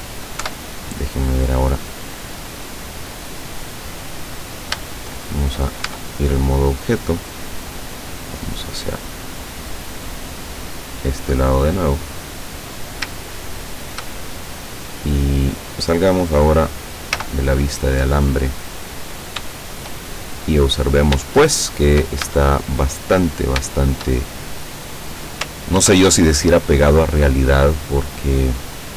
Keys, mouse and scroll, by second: 0.4-1.7 middle drag, 0.5 KP_7, 1.7-2.4 scroll down 1, 2.4 middle click, 5.9 Tab, 6.6-7.3 scroll down 3, 8.0-8.3 scroll down 2, 9.7-12.9 drag, 13.4 shift+middle click, 14.3 shift+middle click, 15.2 scroll down 2, 15.6 middle click, 17.2 z, 17.6 middle click, 18.4-19.4 scroll up 2, 19.6-20.8 shift+middle drag, 20.8-21.2 scroll up 1, 21.4 shift+middle click, 22.3 shift+Tab, 23.7 shift+middle click, 24.4-25.0 shift+scroll up 3, 25.8 ctrl+r, 27.5 click.